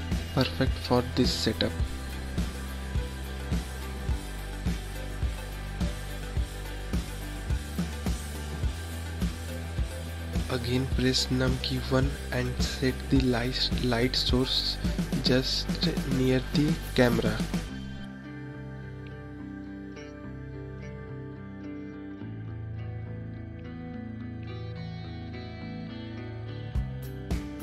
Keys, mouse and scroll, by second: 0.8 scroll up 1, 1.3 scroll down 1, 5.3 click, 6.8 KP_1, 8.1-9.2 scroll up 10, 9.8-11.1 scroll up 10, 13.2-14.7 drag, 16.0 ctrl+click, 25.5 KP_0, 27.1 click.